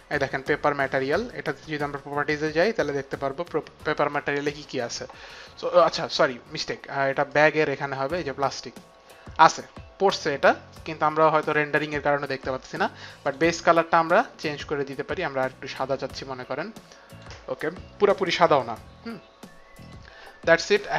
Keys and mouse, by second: 0.1 click, 2.3 click, 7.3 click, 8.1 click, 13.3 click, 14.4 click, 19.9 click.